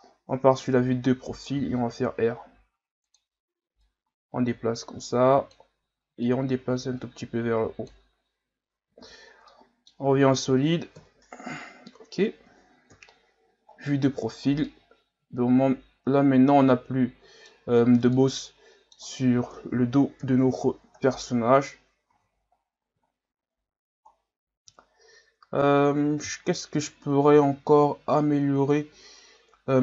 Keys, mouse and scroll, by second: 1.6 r, 3.8-8.9 drag, 8.9 z, 9.2 scroll down 2, 9.5 middle click, 10.0 Tab, 11.0 KP_1, 11.9-12.9 scroll down 3, 12.9 KP_3, 13.7-14.3 scroll up 1, 14.3-14.7 scroll up 6, 14.7-17.7 middle drag, 17.7-18.1 scroll up 2, 18.1-20.2 middle drag, 20.2 KP_1, 21.0-22.1 scroll down 5, 22.1 a, 22.4-23.4 scroll down 9, 23.4-24.1 scroll up 4, 24.1 scroll down 1, 24.9 scroll up 1, 25.7-27.0 scroll up 8, 29.7-29.8 scroll up 1.